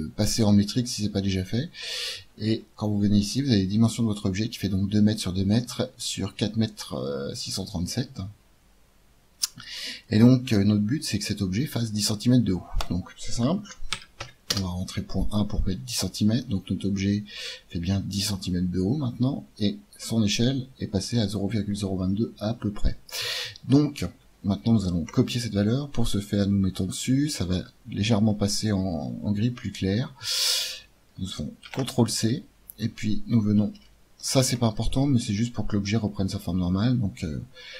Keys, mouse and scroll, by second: 1.8-6.2 middle drag, 9.5-14.5 drag, 16.2-20.2 middle drag, 31.6 ctrl+c, 33.7 ctrl+v, 34.8 ctrl+v.